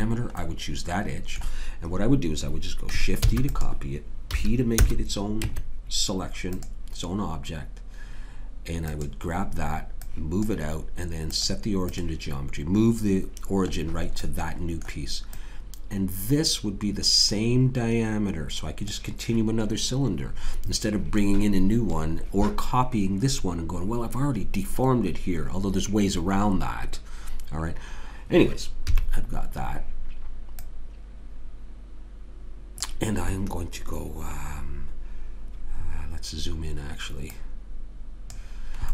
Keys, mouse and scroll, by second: 3.3 shift+d, 4.3 p, 5.4 Tab, 8.9-12.9 drag, 13.7-15.3 middle drag, 15.3 click, 28.9 KP_3, 30.5-32.1 drag, 35.8-37.3 middle drag, 37.3-38.3 right drag, 38.3 click.